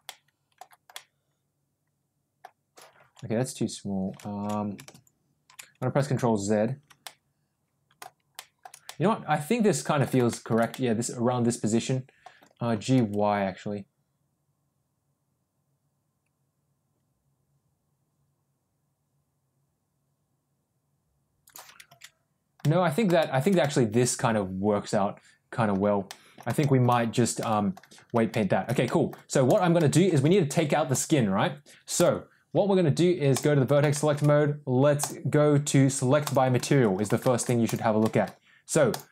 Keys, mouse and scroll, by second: 0.0-0.5 middle drag, 0.8-2.3 middle drag, 3.2 ctrl+z, 6.9-7.8 middle drag, 7.8 shift+middle click, 8.7-9.9 middle drag, 10.2 shift+middle drag, 10.6-12.1 middle drag, 12.6 g, 22.1 ctrl+z, 22.5 middle click, 23.1 shift+middle click, 23.5-25.6 middle drag, 26.0 middle click, 26.5 shift+middle drag, 27.3-27.7 middle drag, 28.2 shift+middle drag, 28.7 middle drag, 29.4 click, 29.6-29.9 middle drag, 30.1 Tab, 30.8 click, 31.9 click, 33.2 click, 33.8 shift+middle click, 36.1 click, 36.5 middle click, 37.1 shift+middle click, 37.5 click, 37.9 middle click, 38.8 click.